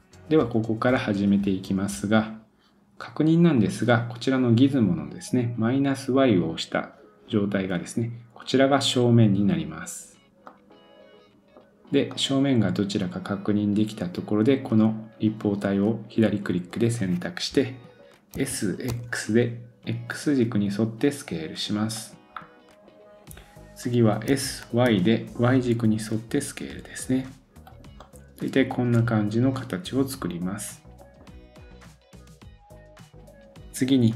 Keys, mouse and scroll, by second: 0.0-6.4 drag, 10.5-15.2 middle drag, 22.3-24.3 middle drag, 22.3-24.3 scroll up 2, 24.3 s, 28.0-31.0 middle drag, 32.2-33.2 middle drag, 33.2 Tab.